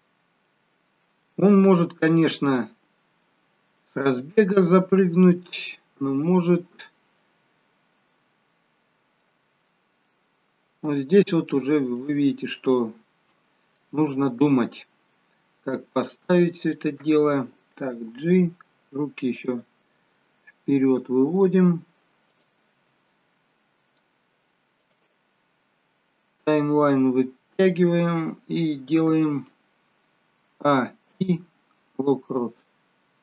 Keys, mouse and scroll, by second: 0.0 scroll down 2, 0.3 middle click, 1.7 shift+middle click, 2.5 middle click, 9.5-10.1 scroll up 4, 10.1 middle click, 11.4 shift+middle click, 12.3 middle click, 15.6-16.7 scroll down 1, 16.7 click, 18.0 g, 20.5 middle click, 22.2 click, 22.9 g, 30.5 a, 31.1 a, 31.2 a, 31.2 i.